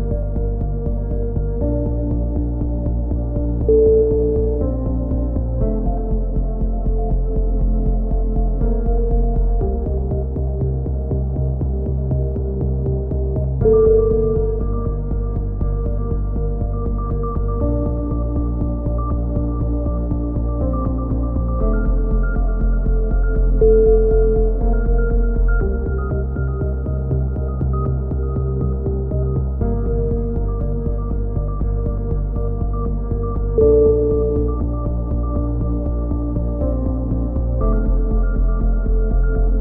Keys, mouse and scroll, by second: 0.1 Tab, 2.2 middle click, 3.8 ctrl+KP_7, 5.0 Tab, 5.3 z, 7.1 click, 7.6 middle click, 8.3 click, 9.4 middle click, 11.4 z, 12.1 z, 14.2 middle click, 14.8-15.8 drag, 17.3 z, 17.9 click, 18.3 Tab, 18.9 z, 20.2 z, 21.6 middle click, 22.9 KP_3, 23.3 z, 23.6-24.6 drag, 25.4 z, 26.3 click, 27.9 click, 28.8-30.4 middle drag, 30.4 right click, 30.7-32.3 drag, 34.3 right click, 35.2 click, 36.1 s, 38.5 click.